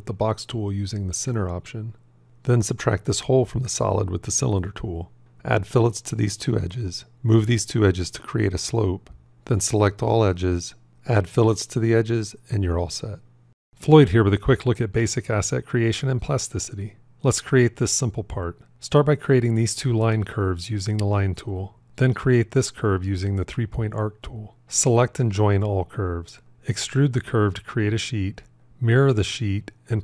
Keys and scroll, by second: 25.5 j, 29.5 alt+x, 29.5 q.